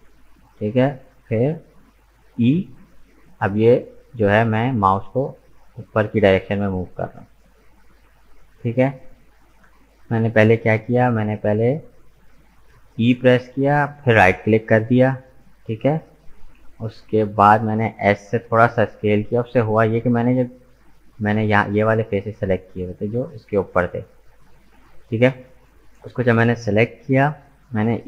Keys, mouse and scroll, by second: 2.3 e, 10.0-13.2 middle drag, 19.5-22.7 scroll up 2.